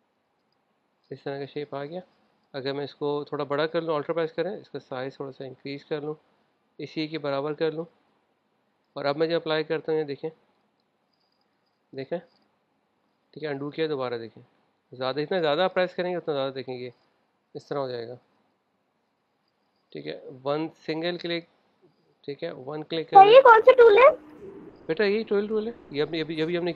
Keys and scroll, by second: 2.0 super+z, 13.1 super+z, 19.3 super+z, 22.6 super+z.